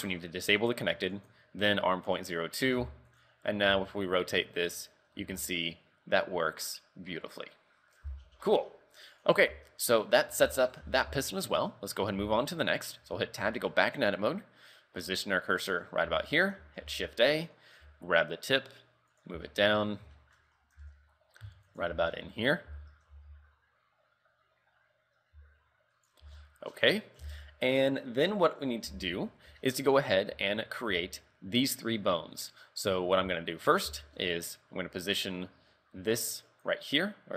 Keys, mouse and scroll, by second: 0.8 click, 1.2 click, 2.9 Tab, 3.2 right click, 3.8 r, 5.2 r, 9.5-9.9 scroll down 3, 9.9-10.3 scroll up 3, 10.3 a, 10.9 z, 11.3 shift+middle click, 11.6 scroll up 2, 12.3 shift+middle click, 12.8 scroll up 3, 13.0 Tab, 13.6 shift+middle click, 15.7 click, 16.0-16.3 scroll down 4, 16.3 shift+middle click, 16.9 shift+a, 17.9 g, 19.5 shift+middle click, 19.9 scroll up 5, 20.2 shift+middle click, 20.5-20.9 scroll up 2, 20.9 g, 22.0 z, 22.2 scroll down 4, 22.7-23.2 scroll up 3, 22.9 z, 23.2 g, 26.3 z, 26.4-27.3 scroll down 9, 27.3 z, 29.2-29.6 scroll up 3, 29.7 shift+middle click, 30.4 a, 31.0 a, 32.0-32.4 scroll up 3, 32.4 right click, 32.8 scroll up 2, 33.5 shift+middle click, 34.1 shift+middle click, 36.6 click.